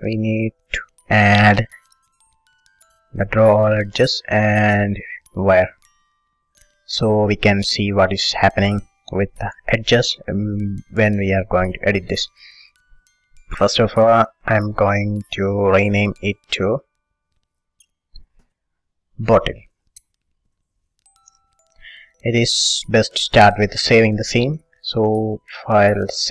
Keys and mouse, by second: 2.5-3.8 drag, 3.8-6.9 middle drag, 6.9-11.4 right drag, 11.5-14.8 middle drag, 14.8-19.9 drag, 20.7 t, 24.7-26.3 drag.